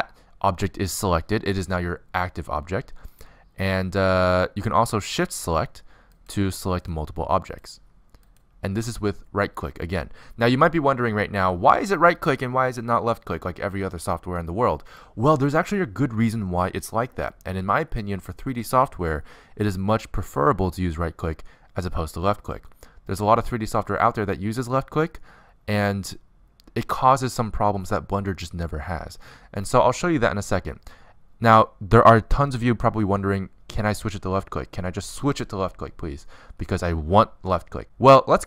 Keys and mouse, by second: 6.7-38.4 right drag.